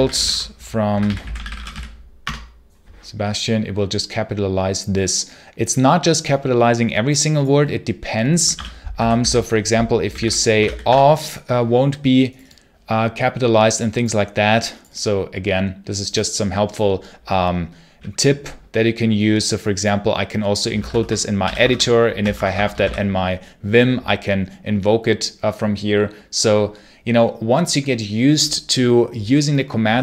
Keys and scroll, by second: 0.0-2.1 typing, 2.1 Return, 8.2-11.0 typing, 20.6 v, 20.7 space, 20.9 Return, 21.3 i, 21.6 shift+Insert, 22.2 Escape, 22.6 Escape, 22.6 space, 22.7 c.